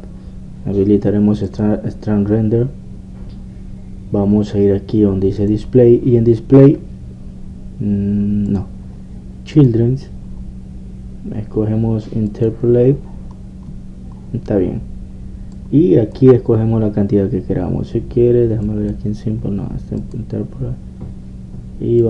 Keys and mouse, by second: 2.4-4.2 drag, 6.4-12.4 drag, 13.3-18.3 drag, 19.6-22.0 drag.